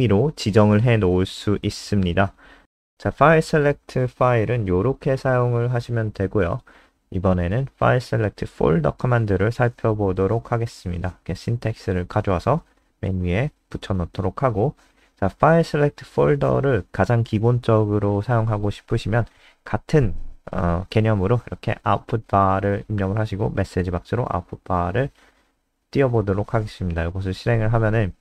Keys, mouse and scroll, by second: 1.8-2.3 scroll down 5, 3.4 click, 4.1 ctrl+Home, 4.3 Down, 4.5 Down, 4.9 Up, 5.1 ctrl+shift+End, 5.4 Delete, 6.0 Up, 6.3 Right, 6.5 shift+End, 7.9 Down, 8.3-10.8 typing, 11.0 shift+Home, 11.7 End, 12.0 shift+Home, 12.3 ctrl+x, 12.4 Up, 12.6 Right, 14.0 Return, 14.3 ctrl+s, 15.0 click, 15.4 scroll down 2, 17.0-25.3 typing, 25.4 Down, 25.6 Up, 27.3 Left, 27.4 Left, 27.6 Left, 27.8 Left, 28.0 Left.